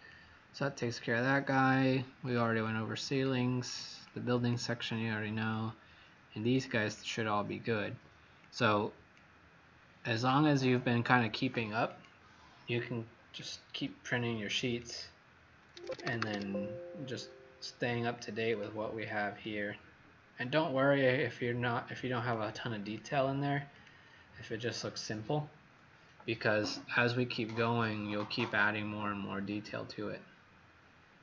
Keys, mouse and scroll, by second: 2.6 click, 3.6 click, 4.0 click, 5.5 click, 13.0-13.9 scroll down 4, 14.1 scroll down 1, 14.7 click, 14.8 click, 17.0-18.1 scroll up 1, 18.5 click.